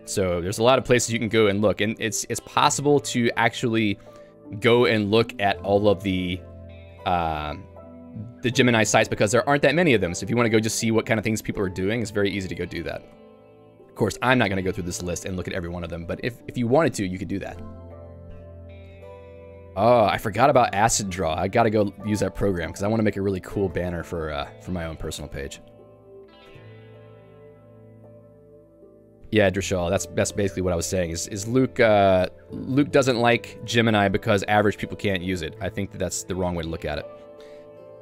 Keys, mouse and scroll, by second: 2.8 ctrl+u, 4.9 ctrl+d, 5.2 ctrl+d, 6.1 ctrl+d, 6.4 ctrl+d, 7.5 ctrl+u, 7.8-9.1 ctrl+u, 24.0 q, 25.2 Escape, 25.6 j, 26.5 Tab, 28.2 j, 33.6 Escape, 35.6 l, 36.2 k, 36.5-37.6 l.